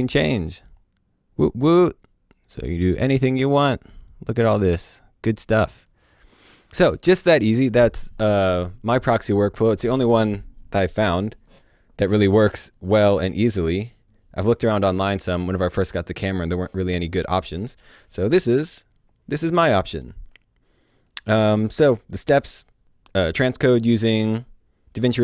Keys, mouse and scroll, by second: 2.4 click, 3.9 click.